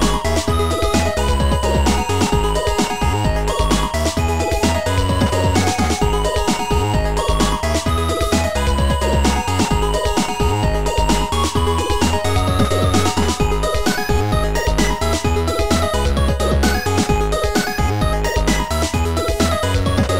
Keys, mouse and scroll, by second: 2.6 click, 5.3 click, 6.0 click, 7.7 click, 9.4 click, 12.5 click, 17.7 click, 19.6 click.